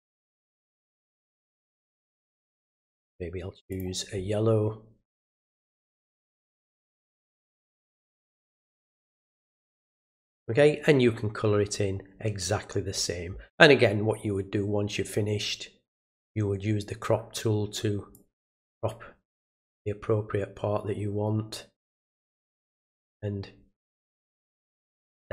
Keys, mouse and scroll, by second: 0.9 click, 2.1 click, 3.7 click, 5.3 click, 6.2 click, 8.0 click, 8.9 click, 9.7 click, 15.9 click, 18.1-19.4 drag, 22.5 click, 24.6 click.